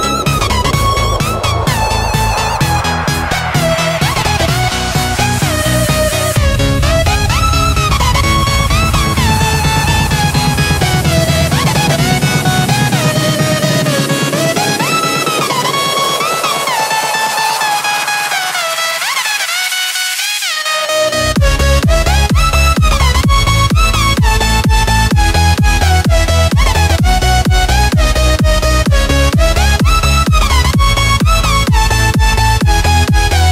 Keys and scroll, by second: 9.7 space, 12.1-13.5 typing, 27.2 o, 28.6 v, 31.2 Delete, 32.1 p.